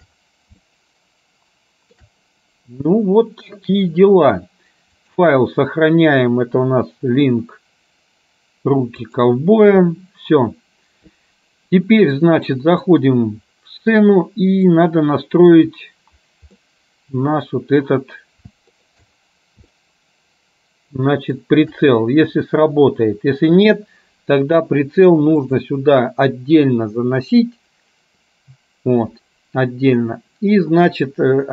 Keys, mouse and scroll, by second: 0.6-2.1 shift+middle drag, 5.0-9.6 drag, 12.6 middle click, 14.8 middle click, 16.8 middle click, 18.8 shift+middle click, 19.8-21.5 shift+middle drag.